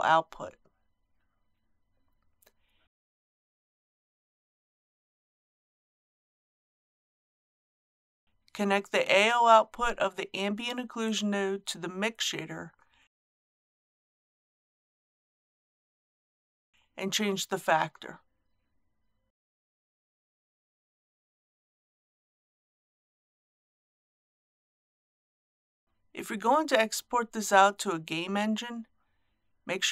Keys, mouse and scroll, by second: 1.9 shift+a, 4.7-25.8 drag, 25.8-26.3 scroll down 1, 26.3 click, 29.0 scroll up 1.